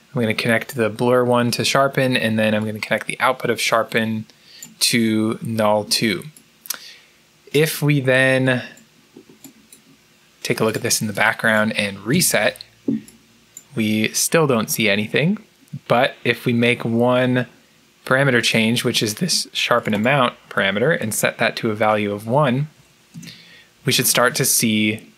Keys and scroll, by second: 22.6 1, 23.0 Return.